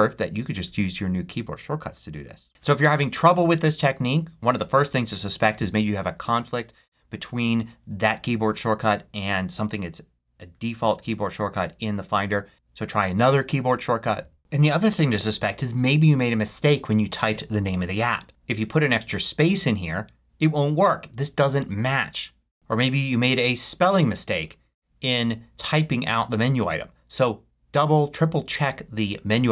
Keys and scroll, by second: 18.9 space, 23.8 BackSpace, 24.3 Return.